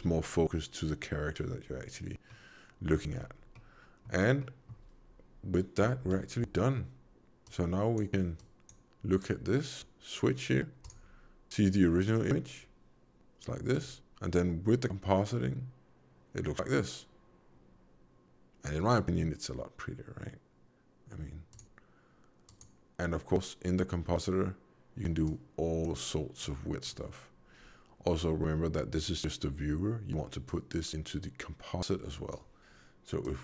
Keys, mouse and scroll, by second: 2.2 middle click, 3.1-3.5 scroll down 4, 3.5 middle click, 4.3 middle click, 5.9 alt+v, 7.4 click, 8.3 click, 10.7 click, 21.4 click, 22.4 click, 26.3 click, 30.4 click, 33.1 click.